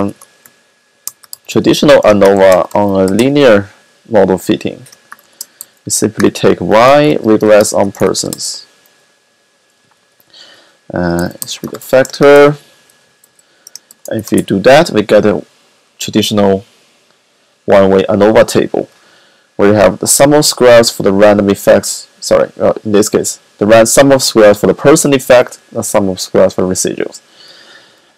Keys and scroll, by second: 0.0-3.1 typing, 4.9-6.2 typing, 7.3-13.6 typing.